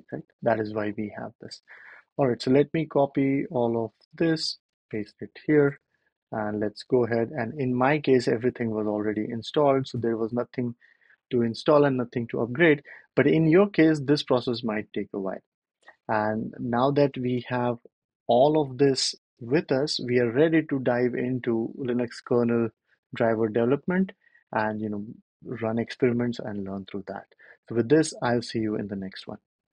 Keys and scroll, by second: 0.0 super+z, 3.6 super+c, 4.8 super+v, 5.5 Return, 17.2 ctrl+l.